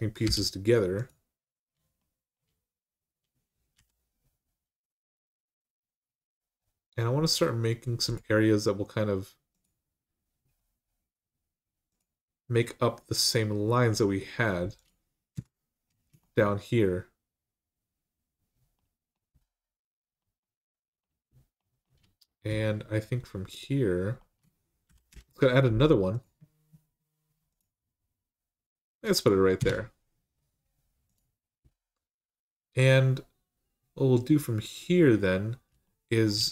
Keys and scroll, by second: 0.0 m, 3.5 k, 15.1 Return, 24.9 k, 29.4 Return.